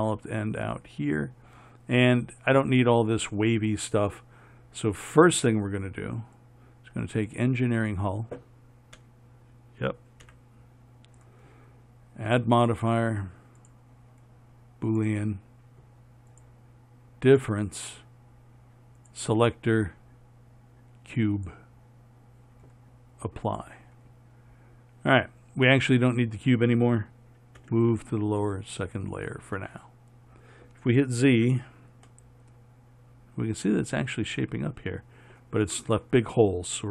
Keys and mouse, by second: 9.3 KP_7, 10.6 KP_1, 27.9 m, 31.7 z.